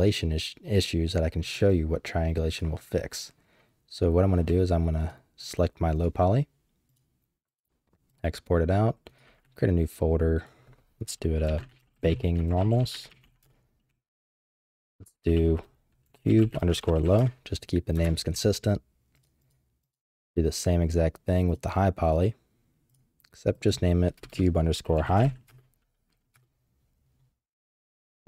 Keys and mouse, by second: 2.5 click, 5.0 click, 5.4 click, 5.9 click, 6.9-8.3 drag, 19.1 click, 19.4 click, 19.8 click, 20.9-22.2 drag.